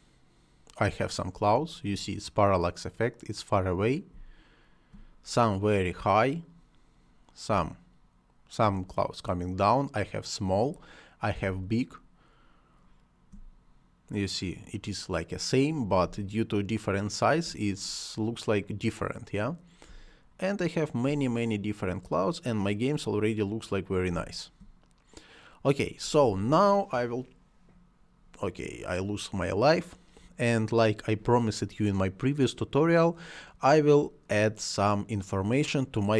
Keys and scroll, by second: 4.1 space, 7.4 space, 11.4 space, 16.0 space, 19.8 space, 24.0 space.